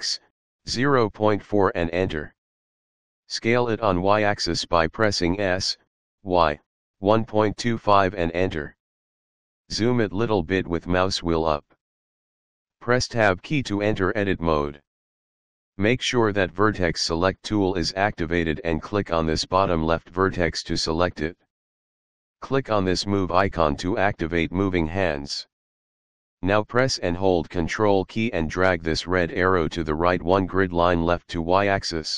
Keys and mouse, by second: 0.1 KP_Decimal, 0.5 KP_4, 1.0 Return, 3.5-6.9 typing, 7.4 Return, 12.7 Tab, 18.6 click, 23.8 click, 28.0 ctrl+click.